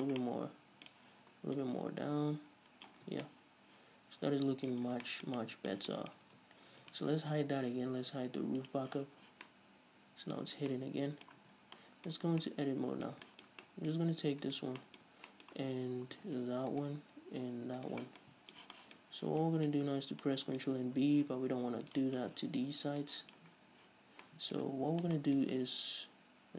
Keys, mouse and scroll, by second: 0.4-1.7 middle drag, 1.7-3.4 drag, 3.2 scroll down 2, 3.3 Tab, 3.4-8.8 middle drag, 5.0 scroll down 2, 6.5 Tab, 8.8 click, 9.4-14.6 middle drag, 9.4 scroll down 2, 10.6 scroll up 2, 11.6 Tab, 11.8 scroll down 2, 12.3 scroll up 2, 14.6 alt+right click, 15.0-16.9 shift+middle drag, 16.9-18.2 alt+shift+right drag, 18.2-21.4 middle drag, 18.2 scroll down 2, 19.2-19.6 scroll up 2, 19.9-20.4 scroll up 2, 20.9-21.4 scroll up 2, 21.4 z, 22.1 ctrl+click, 23.2 ctrl+click, 23.3 middle click, 23.7-24.0 scroll down 1, 24.0 z, 24.4-26.5 middle drag.